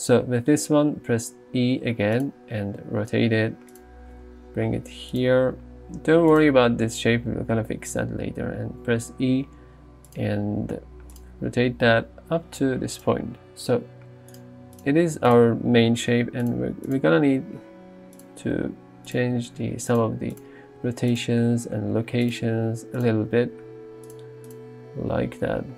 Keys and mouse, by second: 1.3 e, 2.8 r, 3.8 click, 4.2 g, 5.2 click, 6.0 r, 8.8 e, 10.6 r, 11.2 click, 11.7 g, 13.7 g, 14.4 click, 15.3 click, 16.0 g, 17.8 s, 18.2 click, 18.6 r, 19.1 click, 19.4 g, 19.9 click, 20.8 g, 21.2 click, 21.9 r, 22.3 click, 22.5 s, 23.4 g, 24.1-25.1 drag, 25.1 g.